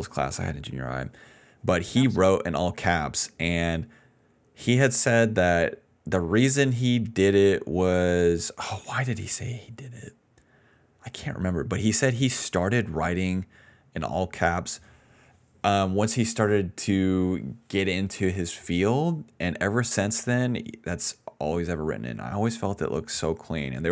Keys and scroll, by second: 1.8 space, 2.2 space, 11.2 p.